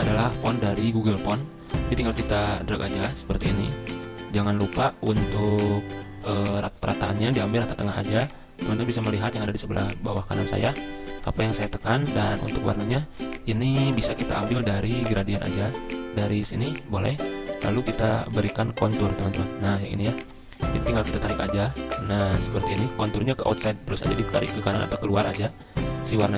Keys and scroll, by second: 0.0-0.5 typing, 3.4 c, 4.7 ctrl+z, 10.6 c.